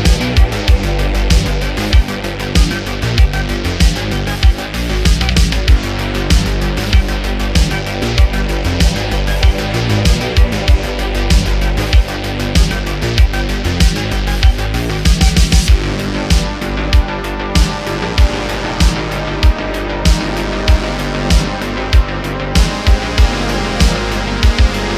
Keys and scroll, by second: 1.3 q, 3.4 super+q, 8.4 q, 12.4 `, 12.9 `, 13.5 `, 15.0 shift+a, 18.4 9, 18.5 0, 18.6 Return, 18.9 `, 19.5 s, 21.1 2, 21.5 Tab, 22.2 2, 23.4 e.